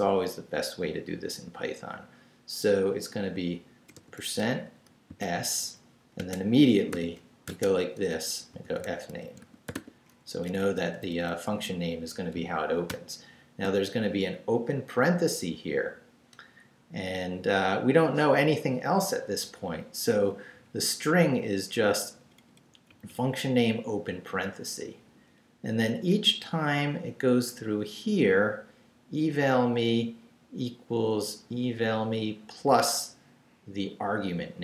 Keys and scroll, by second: 0.3 Left, 5.2-10.2 typing, 5.6 Right, 12.3 shift+Left, 12.9 shift+9, 20.6 Down, 21.5 Up, 22.0 Left, 22.9 Right, 24.8 Down, 26.4 Right.